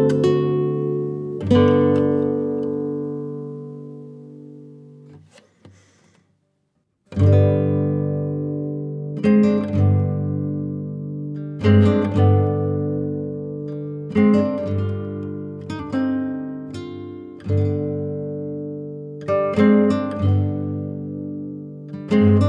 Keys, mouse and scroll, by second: 14.0 click, 14.1 click, 14.5 click, 15.0 middle click, 15.2 click, 17.1 middle click, 17.2 scroll up 1, 17.3 middle click, 18.1-22.4 scroll up 8.